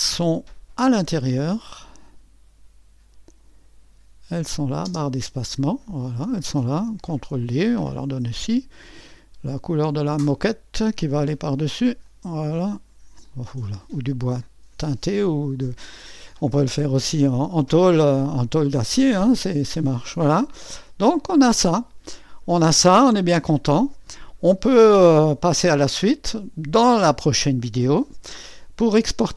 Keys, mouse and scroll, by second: 0.8-7.2 drag, 7.2 ctrl+d, 8.8-12.0 drag, 12.0-13.4 drag, 14.4 click, 15.8-19.6 drag, 19.6-20.0 scroll down 2, 20.0-22.7 drag, 23.6-27.1 drag, 27.1-29.3 middle drag.